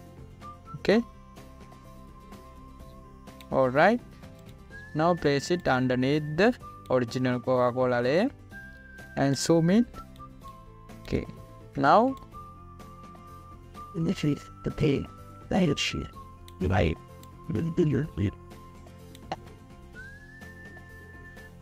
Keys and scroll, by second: 10.5 z, 11.4 space, 12.8 v.